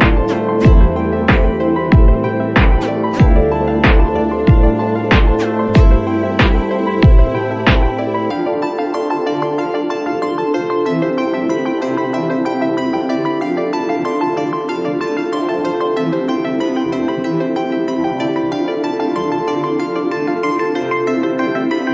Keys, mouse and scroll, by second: 9.9-10.5 scroll up 1, 10.7 click, 13.1 click, 14.9 click, 15.4 scroll down 1, 15.6 click, 16.1 scroll up 1, 16.2 click, 16.6 scroll up 1, 16.7 [, 16.8 space, 17.5 click, 17.6 click.